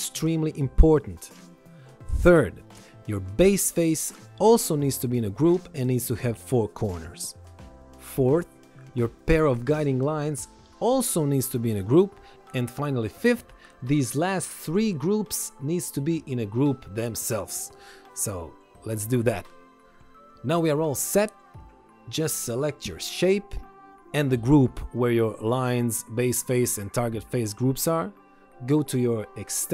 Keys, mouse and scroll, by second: 3.8 click, 15.0 ctrl+shift+click, 15.5 ctrl+click, 16.4 ctrl+click, 17.7 right click, 19.7 click, 25.4 ctrl+click, 29.6 click.